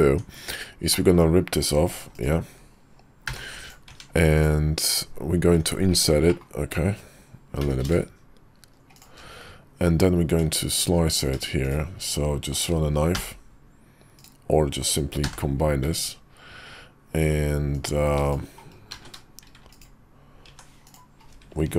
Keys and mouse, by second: 0.0 Tab, 0.8 middle click, 1.8 shift+d, 3.6 p, 3.8 Tab, 4.3-4.9 drag, 5.5 Tab, 6.2 middle click, 7.5 i, 10.2 Tab, 11.5 shift+click, 13.1 k, 15.1 j, 17.6 click, 18.8 z, 20.4 Tab, 20.8 click.